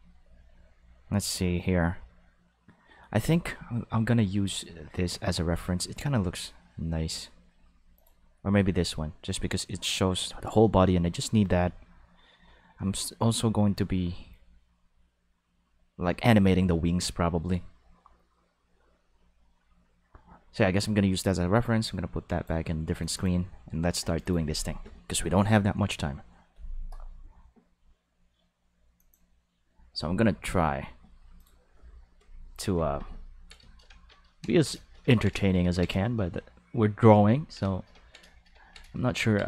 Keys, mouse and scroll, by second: 4.4 click, 7.9 click, 21.2-22.4 drag, 23.0 click, 23.1 click, 24.2 click, 29.0 click, 31.4 click.